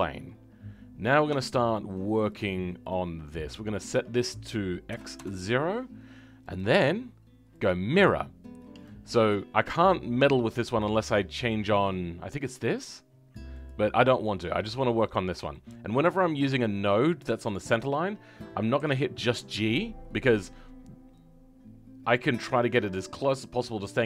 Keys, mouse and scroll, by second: 15.5-17.9 shift+middle drag, 17.9 click.